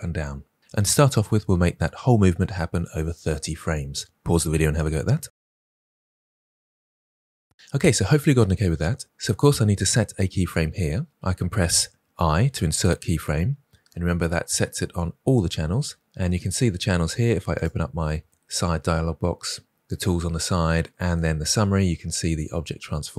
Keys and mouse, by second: 12.1 i, 17.5 click, 21.0 click.